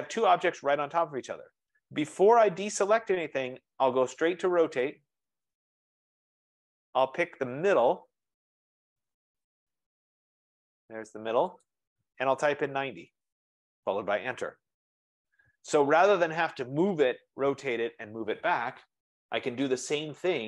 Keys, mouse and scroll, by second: 5.0-6.4 typing, 8.7-9.5 scroll, 10.9 typing, 11.3 F15, 11.7 click, 12.5-13.2 typing, 14.4 Return.